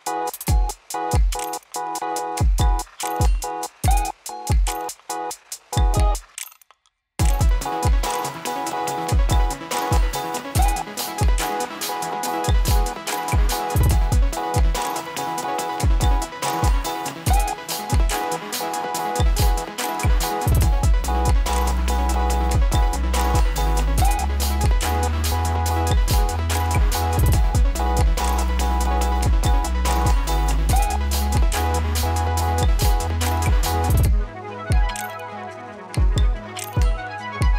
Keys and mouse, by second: 1.0 n, 1.3 space, 6.6 space, 8.3 right click, 9.2-13.1 drag, 13.1 ctrl+a, 13.8-16.5 drag, 16.8 s, 19.5 click, 21.2 Return, 21.7 click, 22.0 space, 28.2 space, 29.4-33.4 drag, 33.8 space.